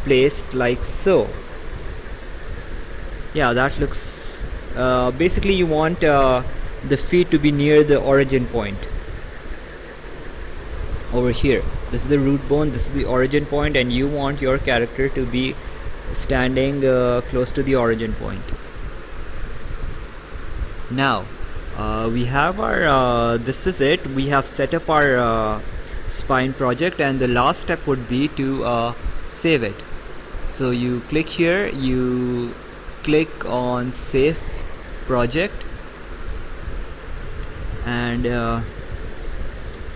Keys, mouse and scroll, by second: 2.7 right click, 9.6 Escape, 10.2 right click, 19.0 right click, 28.9 click, 36.0 click.